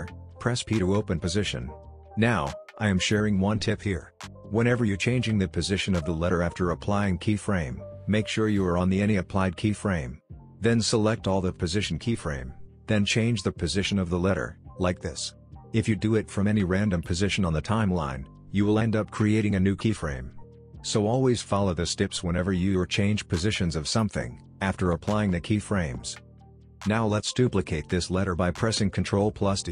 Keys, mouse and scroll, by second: 1.0 p, 4.7-5.3 shift+drag, 6.2-6.5 shift+drag, 7.5-8.1 drag, 19.5 ctrl+z, 20.0-22.9 drag, 25.9 ctrl+d, 26.5 click, 29.2 click.